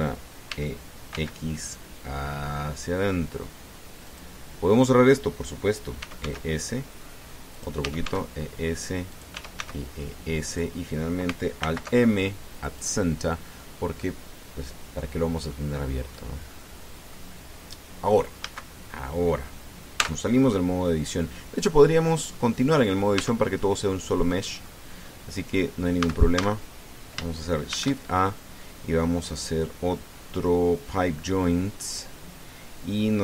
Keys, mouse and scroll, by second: 0.3 click, 1.3 e, 1.9 x, 4.8 click, 6.8 e, 7.0 s, 8.3 click, 8.6 e, 8.8 s, 9.9 click, 10.2 e, 10.4 s, 11.3 click, 12.4 alt+m, 13.4 click, 14.1-14.4 scroll down 2, 14.8-16.5 drag, 16.9 click, 17.5-17.8 scroll down 1, 17.9-19.0 middle drag, 19.2 a, 20.8 Tab, 21.6-22.9 drag, 23.1 click, 24.0 Tab, 25.1 middle click, 25.9 scroll down 2, 26.8 a, 28.5 shift+a.